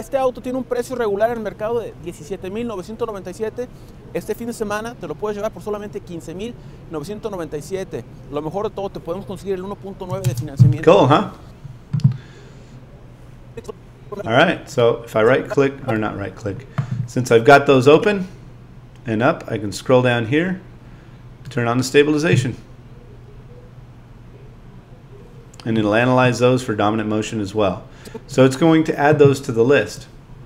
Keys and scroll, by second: 10.2 space.